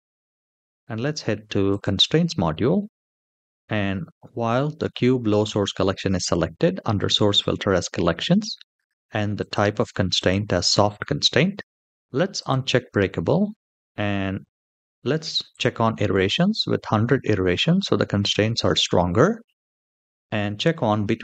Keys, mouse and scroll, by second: 1.4 click, 7.7-8.2 scroll down 3, 9.1 click, 12.1 click, 15.2 click.